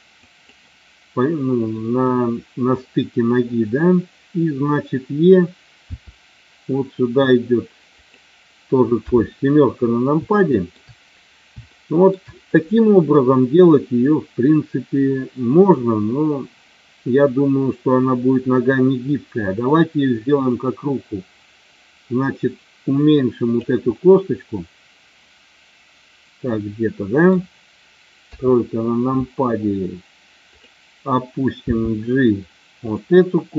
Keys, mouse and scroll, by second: 0.0 click, 5.9 e, 7.8 click, 8.9 KP_7, 10.2 shift+middle click, 11.7 shift+middle click, 20.5-23.5 drag, 23.9-27.3 middle drag, 28.2 KP_3, 30.4 click, 31.7 g, 32.8 click.